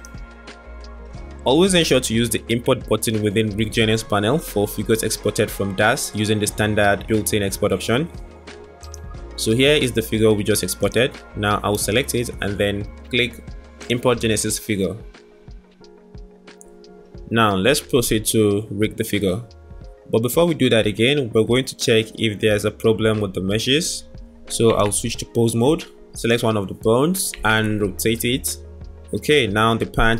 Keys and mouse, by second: 17.9-18.7 middle drag, 20.0-21.3 middle drag, 24.7 Tab, 27.3 r.